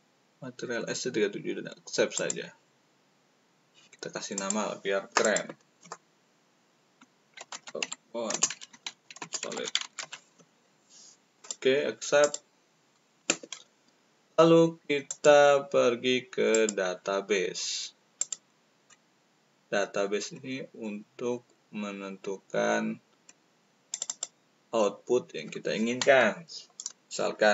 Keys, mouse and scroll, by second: 2.1 click, 4.3 click, 5.2 click, 7.3-9.9 typing, 11.3 click, 12.2 click, 15.0 click, 16.5 click, 18.1 click, 20.1 middle click, 23.9 click.